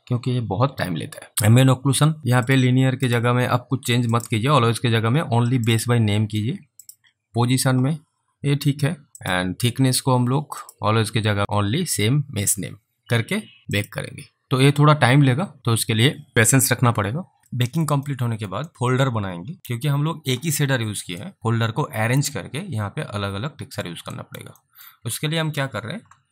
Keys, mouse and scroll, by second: 2.5 click, 11.4 click, 13.7 click, 15.1 click, 17.6 alt+click, 18.1 alt+middle click, 18.7 alt+click, 21.3 alt+right click, 22.4 alt+click, 24.2 alt+right click, 24.6 alt+middle click.